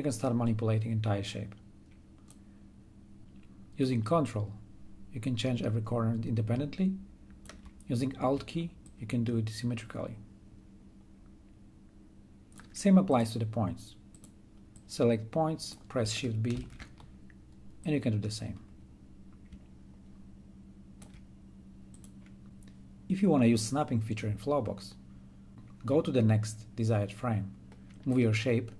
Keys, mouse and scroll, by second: 16.5 shift+b, 17.7-21.9 drag, 25.3 click.